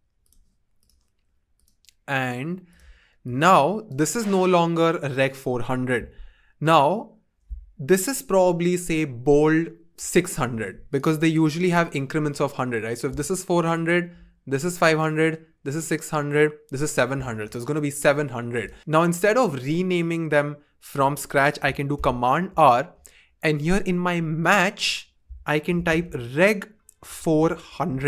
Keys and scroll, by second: 21.9 super+r, 25.4-28.0 typing.